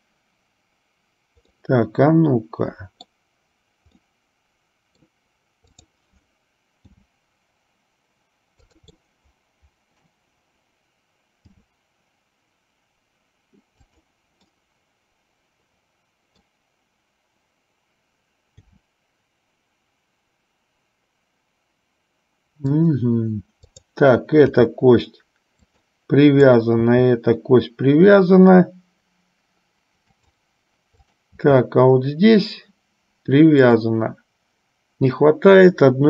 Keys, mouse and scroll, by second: 1.6-3.5 middle drag, 4.3 middle click, 6.0 click, 7.2 g, 9.2-10.3 middle drag, 11.7 g, 14.7-16.7 middle drag, 18.7 g, 23.8 click, 24.7 g, 27.1 g, 31.3 click, 31.8 g.